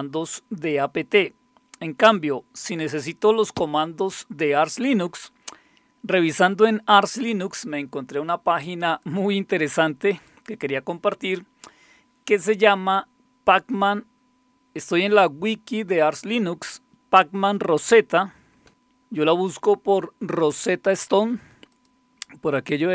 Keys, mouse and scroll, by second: 9.1 click, 10.2 click, 18.7 middle click, 21.7 click.